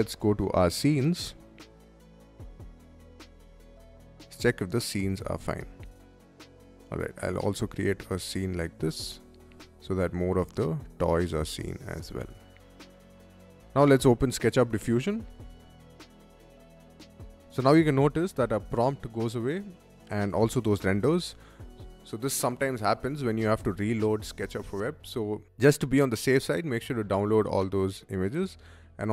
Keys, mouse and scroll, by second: 1.0 click, 1.9 click, 4.9 click, 6.6 middle click, 7.5-8.9 shift+middle drag, 9.2 shift+middle click, 10.4-12.6 shift+middle drag, 14.2 click, 15.2 click, 15.4-17.4 right drag.